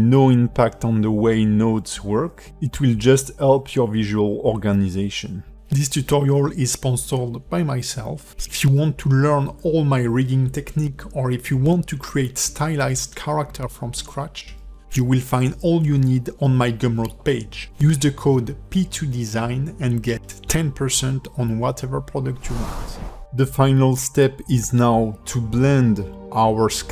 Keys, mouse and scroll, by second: 1.9 click, 23.9 click, 24.5 shift+middle click, 25.2-25.7 scroll up 5, 26.0 shift+middle click, 26.7 click.